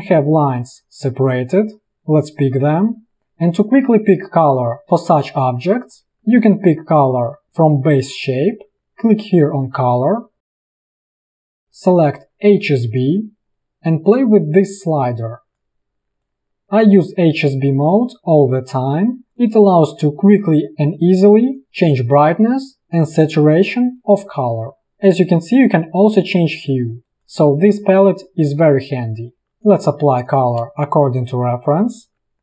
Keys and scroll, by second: 0.3 ctrl+z, 30.0 v, 30.8 space.